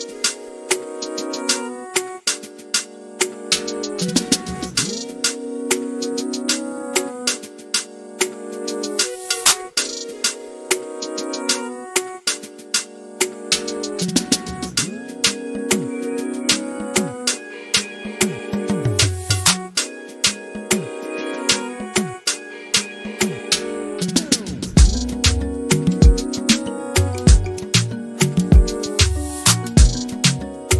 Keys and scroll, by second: 12.7 typing, 14.2 typing, 29.6-30.0 typing.